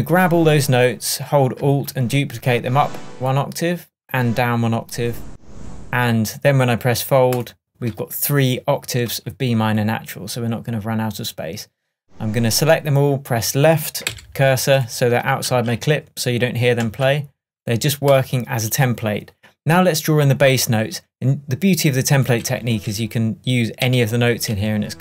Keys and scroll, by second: 14.1 Left, 15.5 space, 16.8 space, 22.9 Left.